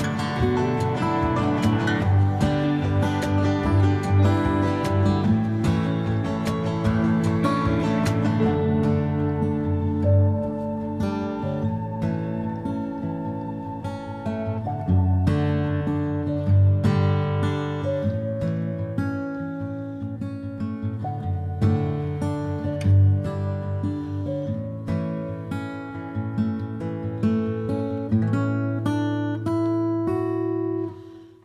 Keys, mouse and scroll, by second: 0.3-6.8 ctrl+drag, 6.8 middle click, 7.1 click, 7.2 middle click, 7.8-8.9 ctrl+drag, 8.9 middle click, 9.6 click, 9.7 middle click, 10.3-11.6 drag, 11.6 middle click, 12.1 click, 12.2 middle click, 12.9-13.7 ctrl+drag, 13.7-15.7 middle drag, 15.7 ctrl+click, 16.6-18.5 middle drag, 18.5-23.3 drag, 23.3 middle click, 23.9-25.1 ctrl+drag, 25.1-27.3 middle drag, 27.3 click, 27.3-28.4 middle drag, 28.4-30.5 drag, 30.5 middle click, 30.9 click, 31.0-31.4 middle drag.